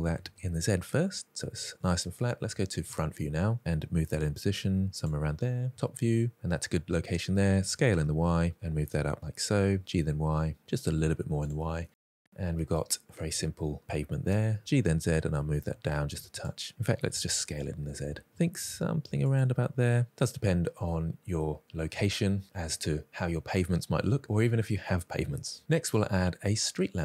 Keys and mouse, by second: 0.1 s, 0.3 z, 2.9 KP_1, 3.9 g, 4.9 click, 5.8 KP_7, 7.1 s, 7.3 y, 9.1 g, 9.9 y, 10.6 drag, 11.0 s, 11.2 y, 11.6 click, 11.9-12.5 middle drag, 12.9-13.4 middle drag, 14.1 g, 14.4 z, 15.8 middle drag, 16.9 s, 17.1 z, 19.4 g, 19.6 z, 20.5-20.8 middle drag, 21.1 click, 21.3 middle drag, 25.7-26.4 middle drag.